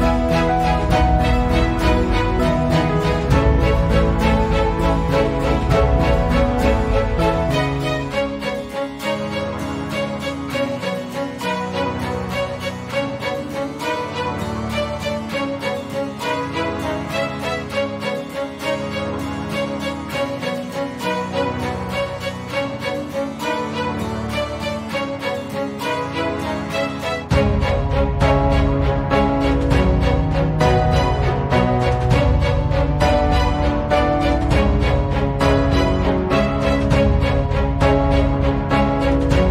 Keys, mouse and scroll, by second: 1.1 ctrl+z, 2.0-2.6 click, 2.7 ctrl+z, 3.2-4.1 drag, 4.6 Delete, 5.5 click, 6.1 Delete, 6.5 click, 6.7 Delete, 7.8-9.3 drag, 9.8 shift+Left, 12.5 click, 13.6 shift+Right, 14.7 click, 16.8 ctrl+scroll down 1, 17.3 click, 18.1-18.7 ctrl+scroll up 1, 19.6 e, 21.5-26.9 drag, 32.3 shift+click, 33.1 click, 35.1 Up, 37.9 click, 38.7 ctrl+alt+c, 39.1 click.